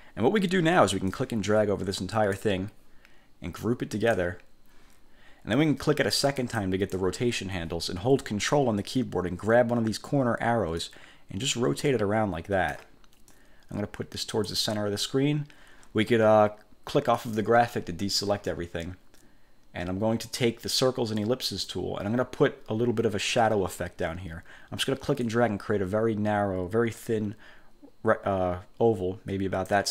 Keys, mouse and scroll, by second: 1.2-2.7 drag, 4.1 click, 6.5 click, 10.9-13.1 ctrl+drag, 13.4-14.7 drag, 17.3 click, 21.3 click, 25.3-29.9 drag.